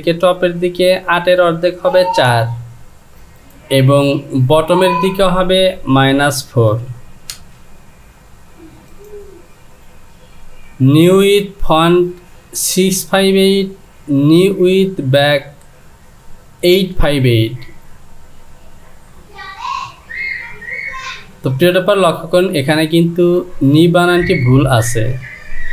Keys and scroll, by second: 2.8 Down, 5.0 Down, 6.0 KP_Subtract.